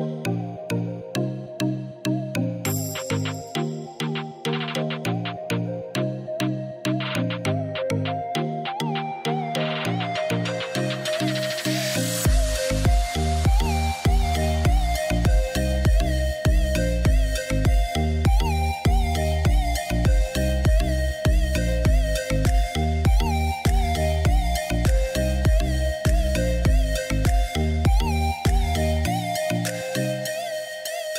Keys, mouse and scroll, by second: 6.4-9.5 right drag, 11.5 click, 12.0-13.6 right drag, 13.6 click, 14.7 click, 15.5-19.5 drag, 21.3 scroll up 4, 22.4 scroll down 1, 22.7-24.8 middle drag, 24.8-25.1 scroll up 1, 25.6 KP_1, 29.0 g.